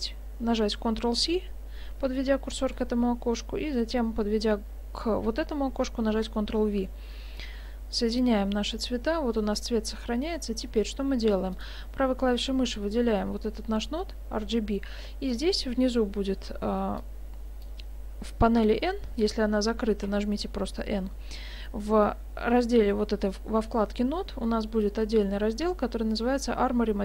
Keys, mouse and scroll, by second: 2.6 ctrl+c, 6.1 ctrl+v, 7.4 click, 11.6 right click, 15.0-17.0 scroll down 4, 17.0 click, 18.7 n, 20.1 n.